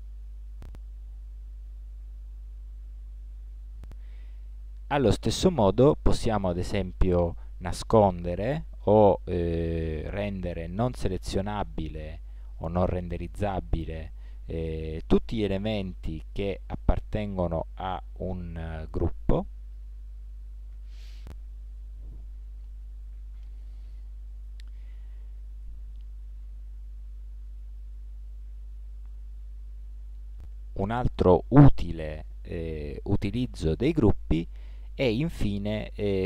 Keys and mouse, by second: 2.9 ctrl+z, 23.5-30.4 middle drag.